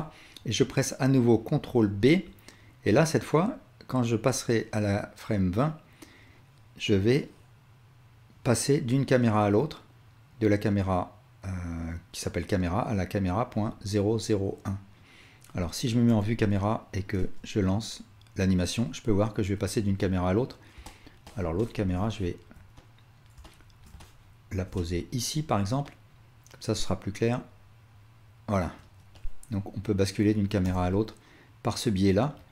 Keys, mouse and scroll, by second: 1.7 ctrl+b, 4.7-16.3 drag, 16.1 KP_0, 17.2 space, 21.7-32.5 alt+shift+drag, 26.8 space, 30.6 KP_0.